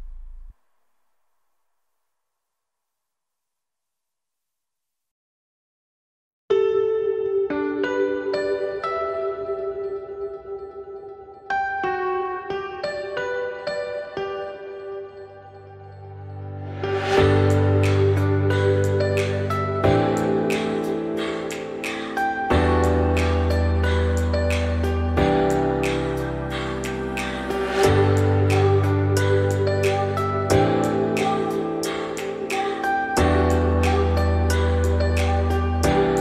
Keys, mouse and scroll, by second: 0.3 g, 2.1-4.0 middle drag, 4.0 g, 7.0 Tab, 8.0-9.0 scroll down 2, 9.0 Tab, 9.3 scroll up 1, 9.5 `, 10.1 scroll up 2, 10.3-10.7 shift+middle drag, 10.7-11.2 scroll up 2, 11.3 g, 13.6 alt+d, 17.6 alt+d, 20.1 alt+d, 24.4 alt+d, 26.6 scroll down 2, 26.7-28.2 middle drag, 28.2 scroll down 1, 28.3-28.9 middle drag, 28.9 Tab, 29.1 `, 29.4-31.1 scroll up 5, 29.7 shift+middle click, 31.1 r, 33.9 Tab, 34.1 scroll down 2, 34.3-35.3 middle drag, 35.3 shift+click, 35.5 shift+click.